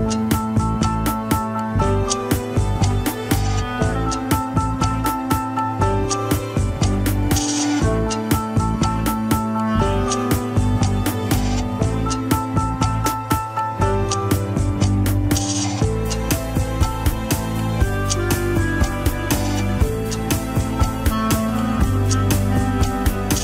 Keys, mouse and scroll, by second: 1.2 ctrl+Tab, 1.8 ctrl+s, 1.9 click, 3.1 click, 3.9 drag, 5.0 click, 6.2 ctrl+Tab, 7.4 ctrl+Tab, 7.8 ctrl+s, 8.2 click, 9.8 g, 10.7 click, 14.6 click, 16.4-18.4 drag, 19.4 click, 20.4 g, 22.2 ctrl+Tab, 22.3 click.